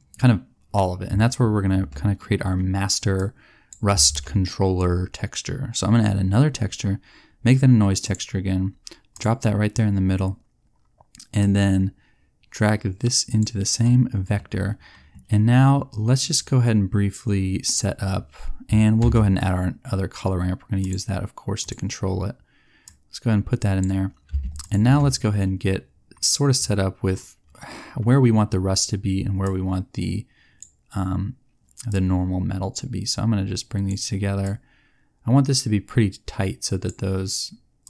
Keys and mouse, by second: 3.1 click, 4.0 shift+a, 11.4-13.4 drag, 19.0 shift+a, 22.8-24.6 drag, 29.4 click, 32.7 click, 33.1 click.